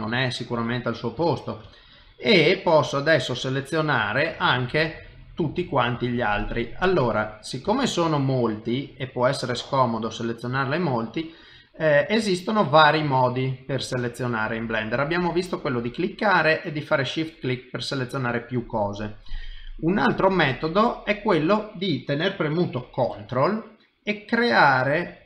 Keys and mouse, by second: 0.2 shift+middle click, 0.8 middle click, 1.3 ctrl+middle click, 1.7 shift+middle click, 2.3 middle click, 3.4 middle click, 4.0 ctrl+middle click, 4.5 shift+middle click, 5.1 middle click, 6.1 shift+middle click, 6.5 middle click, 7.7 shift+middle click, 8.1 middle click, 10.2 shift+middle click, 10.6 middle click, 12.5 middle click, 13.1 shift+middle click, 13.6 middle click, 14.3 shift+middle click, 17.8 middle click, 19.4 middle click, 24.1 ctrl+right click.